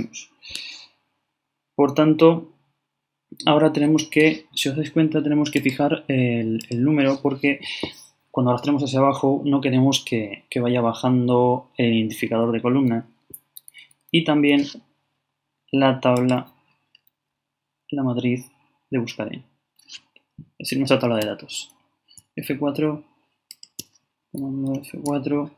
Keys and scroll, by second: 13.8 shift+4.